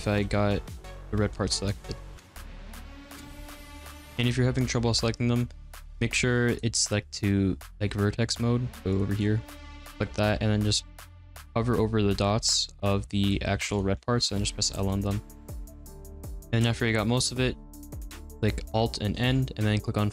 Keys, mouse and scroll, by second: 0.2 ctrl+z, 0.8 middle click, 1.4-4.0 typing, 2.1 ctrl+z, 2.2 middle click, 2.3 ctrl+z, 2.6 middle click, 2.8 middle click, 2.9 ctrl+z, 3.2 middle click, 3.3 ctrl+z, 3.6 ctrl+z, 3.6 middle click, 3.7 ctrl+z, 3.9 middle click, 4.1 ctrl+z, 6.4 click, 6.8 click, 8.9 click, 9.1 click, 13.3 g, 14.3 ctrl+z, 14.8 middle click, 15.4 h, 15.5 ctrl+z, 15.5 g, 15.6 ctrl+z, 15.6 middle click, 15.7 x, 15.7 middle click, 15.9 ctrl+z, 16.0 middle click.